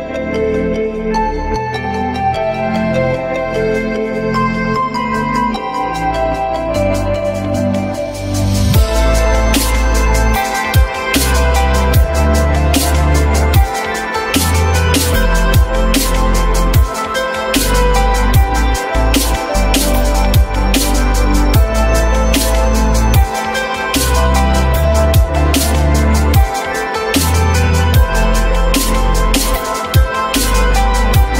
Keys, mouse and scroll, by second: 0.3 alt+middle click, 5.4 alt+middle click, 6.2 ctrl+z, 7.1 alt+middle click, 7.9 alt+middle click, 12.2 s, 23.3 alt+scroll up 1, 23.5 alt+middle click, 23.6 alt+double middle click, 24.0 alt+double middle click.